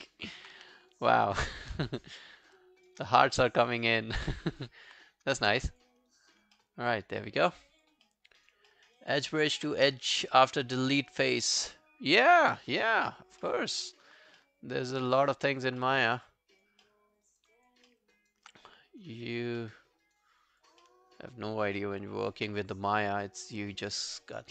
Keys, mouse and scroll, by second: 0.1 alt+middle click, 0.6 q, 0.8 right click, 1.9 shift+right click, 4.2 alt+click, 6.1 right click, 6.6 alt+middle click, 6.9 alt+scroll down 3, 7.5 alt+scroll down 1, 7.6 alt+click, 8.1 alt+middle click, 8.3 alt+right click, 8.7 alt+middle click, 9.0 alt+right click, 13.5 alt+middle click, 13.5 alt+right click, 13.7 alt+right click, 14.0 alt+click, 14.4 alt+middle click, 15.0 alt+right click, 15.3 alt+click, 15.8 alt+middle click, 16.1 alt+right click, 16.3 alt+click, 16.9 alt+middle click, 17.3 alt+right click, 17.5 alt+click, 17.9 alt+middle click, 18.2 alt+right click, 19.2 alt+click, 19.6 alt+middle click, 20.1 alt+right click, 20.4 alt+click, 20.8 alt+middle click, 22.1 alt+middle click, 22.2 alt+right click.